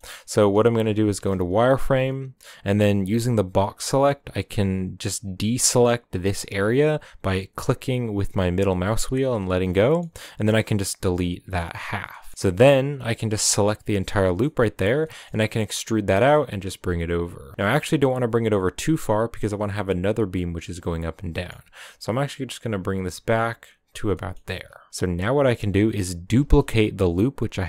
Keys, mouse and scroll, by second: 1.2 z, 9.6 z, 9.8-11.7 middle drag, 11.7 x, 12.1 middle drag, 12.3 scroll up 1, 12.3-13.5 middle drag, 13.5 alt+right click, 14.2-15.0 scroll down 6, 14.4 middle drag, 15.0 e, 18.7-20.9 middle drag, 20.9 scroll up 2, 21.2 g, 23.9 scroll down 3, 24.1 middle click, 24.4-24.9 scroll up 3, 24.5 middle click, 24.9-26.4 middle drag, 26.4 shift+d.